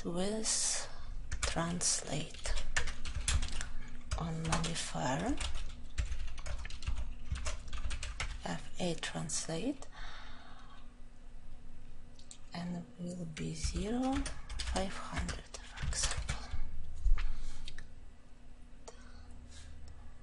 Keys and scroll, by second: 3.3 ctrl+;, 7.2 ctrl+;, 7.4 ctrl+j, 8.2 Return.